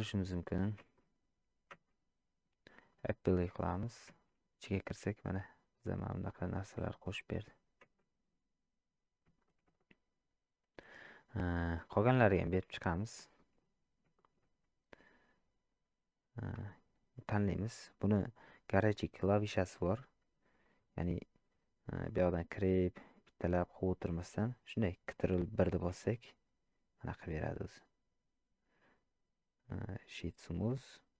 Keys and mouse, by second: 2.9-3.6 drag, 4.7 middle click, 5.8 click, 6.5 click, 6.9 click, 7.8 Tab, 9.5 shift+middle drag, 9.8-11.1 middle drag, 11.7 shift+middle click, 12.5 shift+middle drag, 13.3 shift+middle click, 14.1 shift+middle drag, 16.6 click, 22.4-23.7 drag, 30.0-30.7 drag.